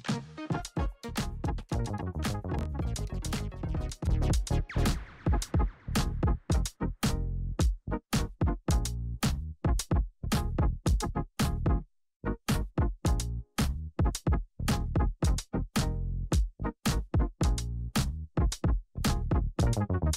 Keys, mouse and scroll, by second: 6.8 F9, 7.9-12.6 drag, 12.6-16.4 drag, 17.8 space.